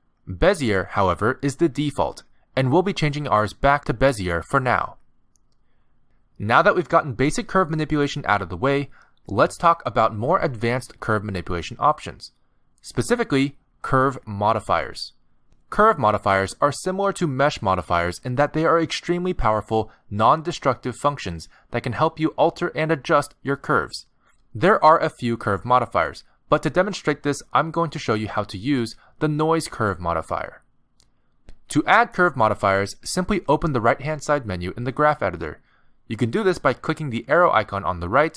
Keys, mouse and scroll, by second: 13.5 middle click, 15.2 shift+middle click, 33.8 click, 37.3 n.